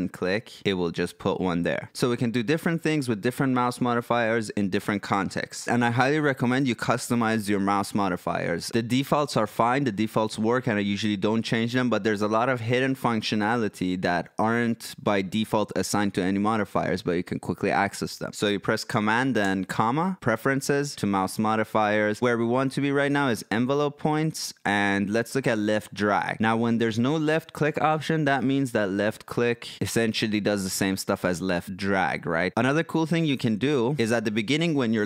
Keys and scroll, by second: 19.4 super+,.